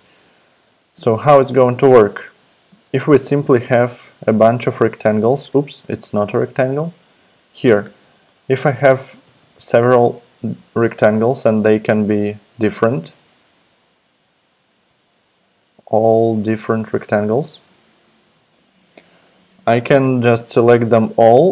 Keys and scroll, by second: 0.0 super+Tab, 3.6 super+f, 5.4 super+BackSpace, 6.1 super+r, 9.2 super+d, 9.4 super+d.